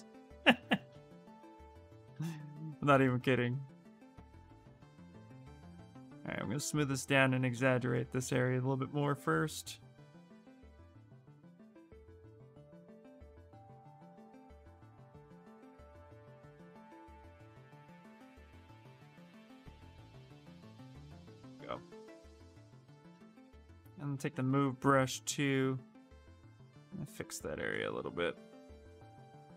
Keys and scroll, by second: 0.2 ctrl+z, 1.3 s, 2.4 space, 16.2 s, 18.0 s, 23.6-24.9 typing, 27.9 s.